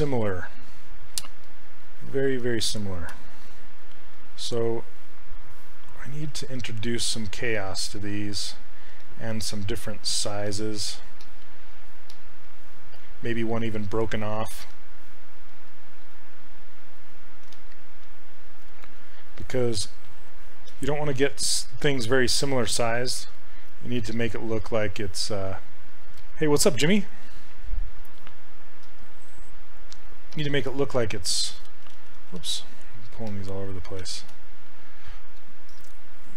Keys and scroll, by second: 3.1 q, 6.3 s, 24.7 s, 28.9 s, 32.2 ctrl+z, 32.4 ctrl+z.